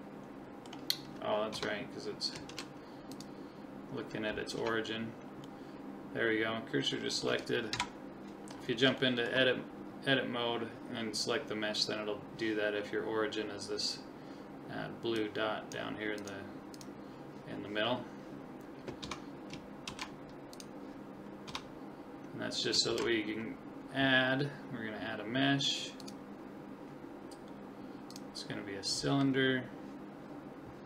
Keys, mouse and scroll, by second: 1.5 Tab, 2.5 shift+s, 4.6 Tab, 5.6-7.4 middle drag, 7.7 KP_1, 8.5 middle click, 8.7-9.0 scroll up 1, 9.0-10.9 middle drag, 15.2-18.5 drag, 19.0 Tab, 19.9 shift+s, 21.5 Tab, 22.9 shift+a, 28.9-30.8 scroll down 2, 28.9 middle click.